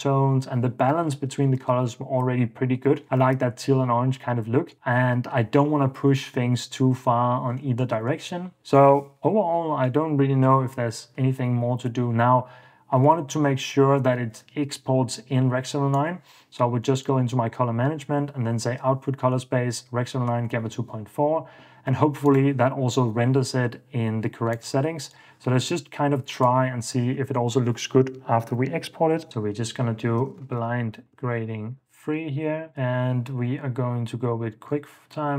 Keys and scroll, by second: 3.2 super+s, 27.1 super+a, 30.2-31.9 typing.